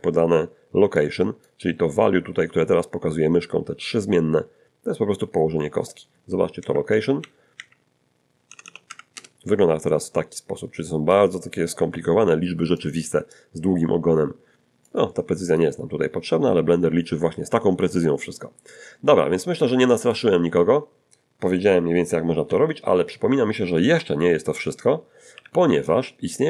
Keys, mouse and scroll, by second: 1.0 click, 6.6 Up, 6.9 Up, 7.2 Up, 8.5 BackSpace, 8.6 BackSpace, 8.9 Delete, 9.1 Return, 11.1-12.9 drag, 13.3-15.0 drag, 15.5 click, 20.0 click, 22.5 1, 25.3 alt+g.